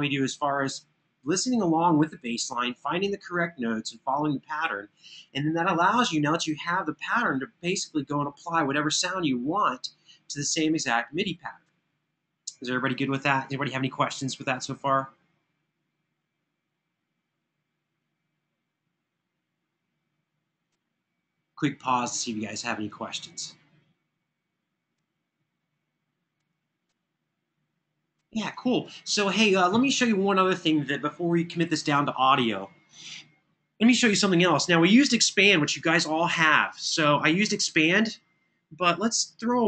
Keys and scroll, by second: 36.2 super+=.